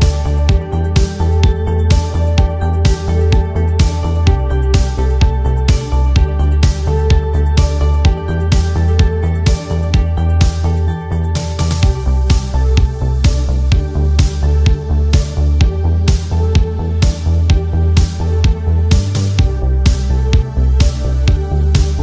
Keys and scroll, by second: 13.7 ctrl+z.